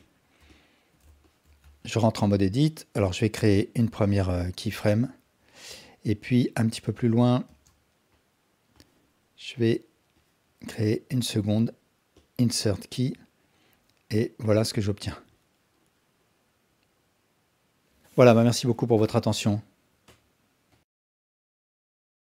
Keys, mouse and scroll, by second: 0.0 alt+click, 0.5-0.9 alt+shift+drag, 1.2 ctrl+alt+drag, 1.6 Tab, 5.0 click, 5.8-6.7 drag, 7.5 shift+space, 8.8 click, 10.2-10.9 drag, 11.3 Tab, 12.3 click, 13.1-16.5 drag.